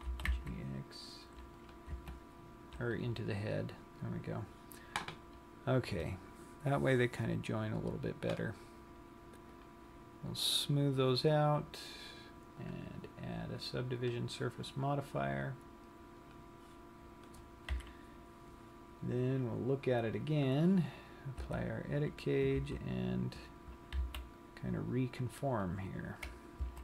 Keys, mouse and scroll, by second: 0.2 g, 1.8 click, 2.1 Tab, 2.7 scroll down 1, 4.3-5.0 scroll up 3, 9.7 click, 10.8 click, 12.7 click, 16.3 click, 17.3-17.8 scroll down 1, 17.8 KP_3, 20.7 click, 21.7 Tab, 22.2-23.0 scroll up 2, 23.0 z, 24.4 c, 26.2 right click.